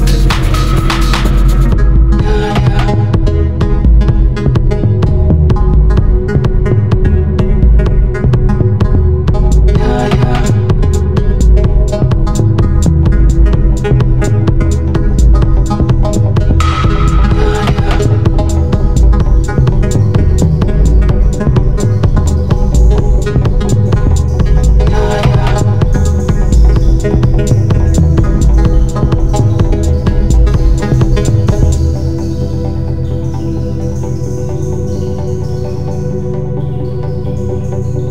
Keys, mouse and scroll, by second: 1.3 click, 6.4 ctrl+z, 7.6 click, 11.8-21.7 drag, 21.8-38.1 drag.